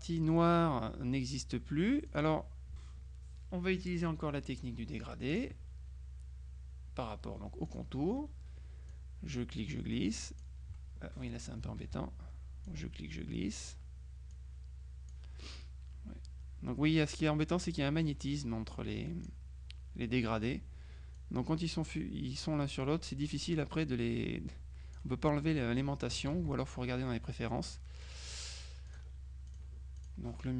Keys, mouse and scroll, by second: 2.2 click, 5.4 click, 7.7 click, 9.0-11.0 drag, 11.9 ctrl+z, 12.7-14.3 drag, 14.4 click, 17.7-19.9 drag, 21.3-25.5 drag, 26.4 ctrl+z, 28.9 click.